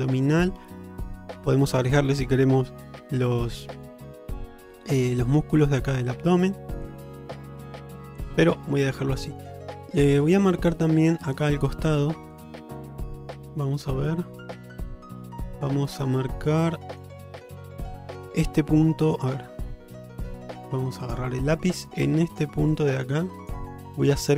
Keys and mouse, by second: 6.9-8.2 middle drag, 8.8 shift+middle click, 9.3 middle click, 10.5 middle click, 11.1 click, 12.4 click, 13.0 Tab, 13.6-17.1 middle drag, 17.3 alt+middle click.